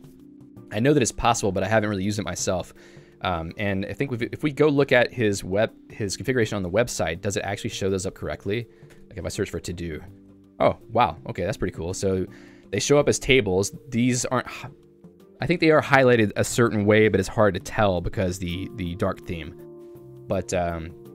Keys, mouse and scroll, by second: 2.6 j, 6.7 super+2.